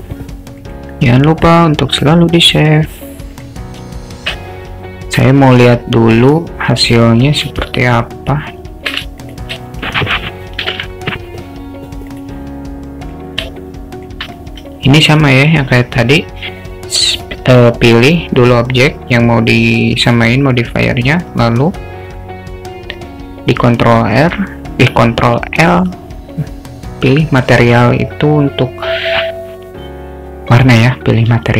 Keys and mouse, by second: 3.4 click, 3.9 alt+shift+middle click, 8.0 shift+click, 10.7 ctrl+l, 13.0 click, 13.7 shift+middle click.